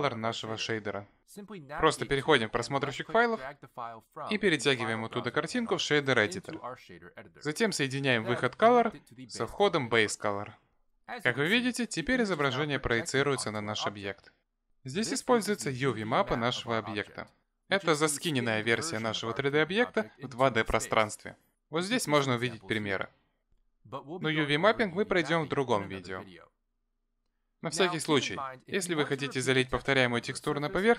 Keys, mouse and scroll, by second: 3.2 click, 4.0 click, 5.0 click, 7.9 middle click, 8.9 click, 10.3 click, 16.1 Tab, 17.8 click, 20.7-22.2 scroll down 11, 22.2 a, 27.3 Tab.